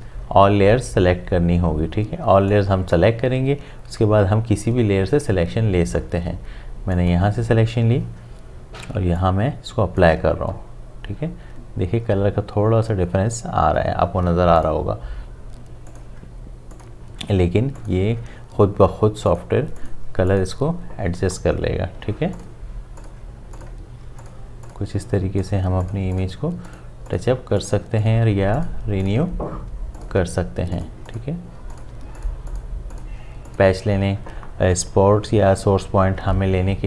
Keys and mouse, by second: 2.5-5.3 drag, 6.9 click, 9.2-12.3 drag, 14.6 click, 30.0 alt+click.